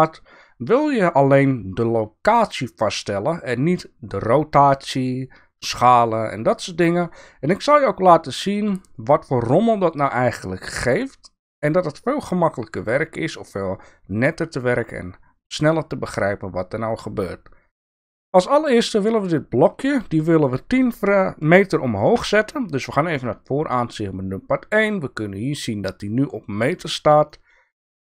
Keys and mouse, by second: 22.1 KP_1, 27.4-27.9 shift+middle drag.